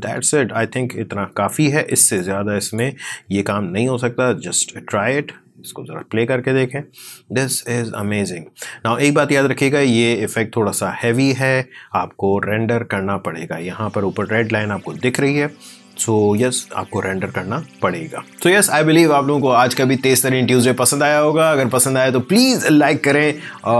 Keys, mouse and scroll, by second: 1.9 click, 4.3 space, 16.2-18.3 drag.